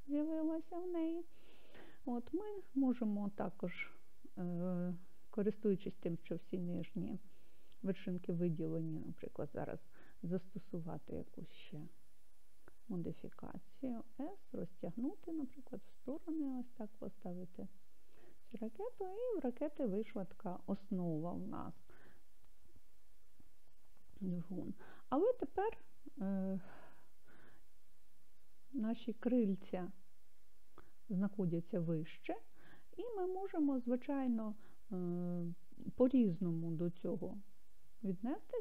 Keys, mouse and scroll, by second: 0.0 scroll down 1, 13.4 s, 18.8 click, 25.8 scroll down 1, 27.6-32.5 middle drag, 33.5-34.4 scroll down 1, 34.4-38.2 middle drag.